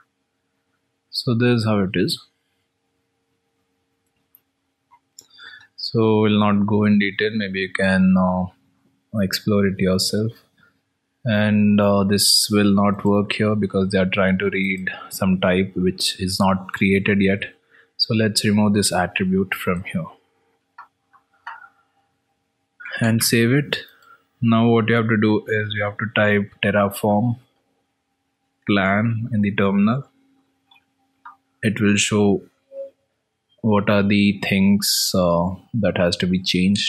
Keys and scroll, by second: 9.5 alt+Tab, 27.8 ctrl+s.